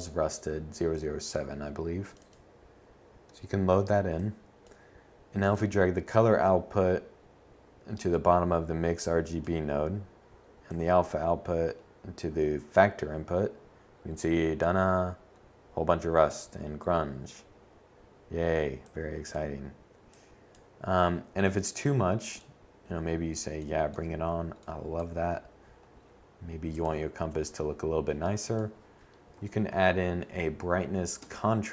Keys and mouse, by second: 8.4-10.4 middle drag, 11.9-13.6 middle drag, 24.9 shift+a, 28.5 Down.